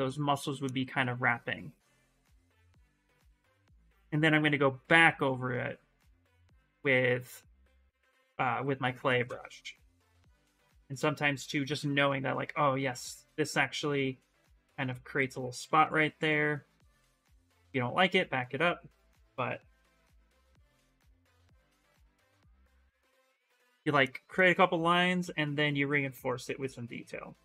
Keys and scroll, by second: 11.4 space, 14.9 ctrl+z, 15.3 ctrl+z, 15.7 ctrl+z, 19.8 s.